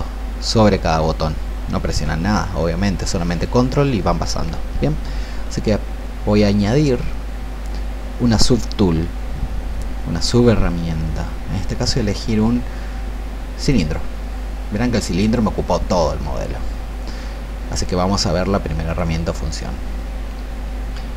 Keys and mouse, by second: 6.2-21.1 drag.